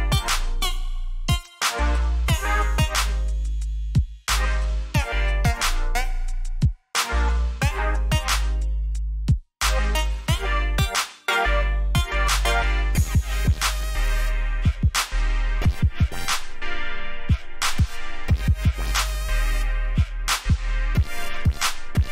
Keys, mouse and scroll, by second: 0.0 ctrl+j, 2.5 click, 9.3 click, 20.0 click.